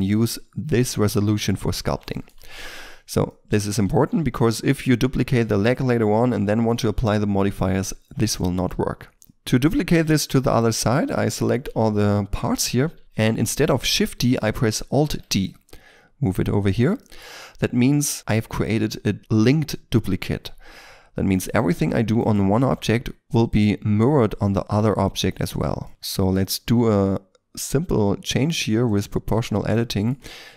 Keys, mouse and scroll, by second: 2.1 shift+middle click, 3.2 middle click, 9.2 middle click, 10.6 shift+right click, 11.9 1, 15.0 alt+d, 15.7 x, 17.0 shift+middle click, 21.3 right click, 21.5 Tab, 22.1 right click, 22.5 g, 23.3 right click, 24.6-25.2 scroll up 1, 25.2-25.8 scroll down 1, 25.8 middle click, 25.9 alt+right click, 29.2 double click, 29.7 middle click, 30.2 g.